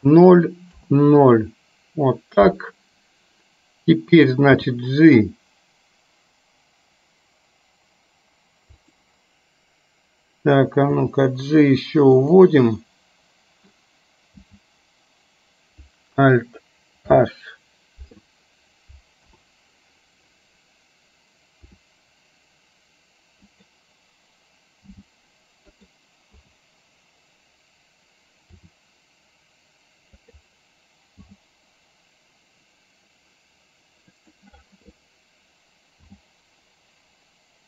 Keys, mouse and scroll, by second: 0.8 KP_0, 4.7 g, 10.9 g, 12.9-13.9 middle drag, 14.4 h, 17.2 alt+h, 19.3 KP_7, 21.7 r, 24.9 g, 26.4 KP_0, 28.5 r, 31.4 g, 36.2 g.